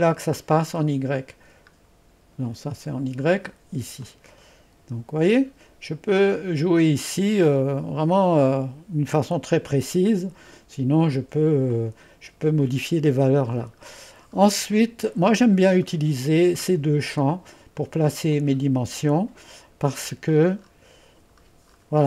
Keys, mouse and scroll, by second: 1.2 click, 1.8 scroll down 1, 2.5-3.0 scroll up 1, 4.1 click, 7.8-9.0 scroll up 1, 9.0-10.1 scroll up 1, 11.7 click, 13.9-15.9 scroll down 1, 15.9-18.3 middle drag, 18.4 click, 19.9-21.4 scroll down 1.